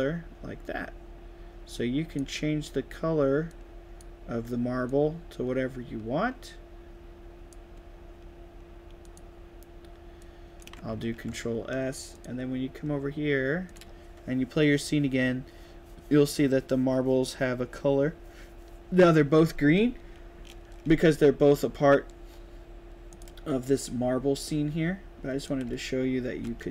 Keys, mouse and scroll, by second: 3.4-3.9 drag, 4.8-7.4 drag, 9.0 click, 10.1 click, 11.0 ctrl+s, 12.0 click, 13.5 click, 23.0 click, 25.4 right click, 25.5 d, 25.9 s.